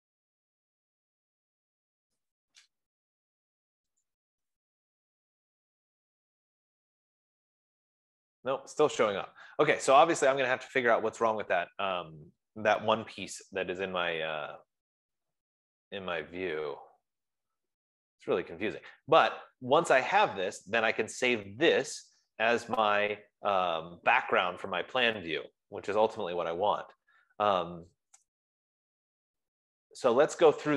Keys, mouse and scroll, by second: 4.7-9.7 drag.